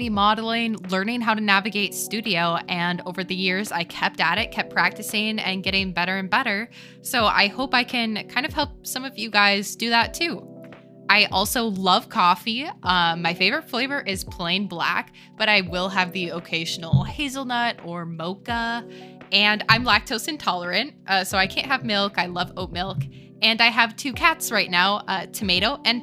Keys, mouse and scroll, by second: 0.1 middle click, 0.4 alt+click, 0.8 shift+click, 1.2 shift+drag, 1.8 click, 2.1 shift+drag, 3.0-4.8 drag, 14.9-15.4 middle drag, 15.7-16.1 middle drag, 16.6 click, 16.8 shift+middle drag, 17.8-19.4 drag, 20.9-22.8 drag.